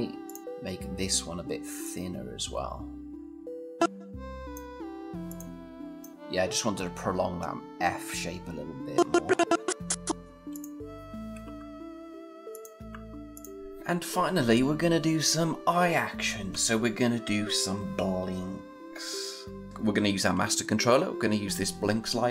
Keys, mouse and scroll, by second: 0.4 scroll down 1, 1.6-4.3 click, 8.7-10.5 click, 11.2 Return, 12.3 click.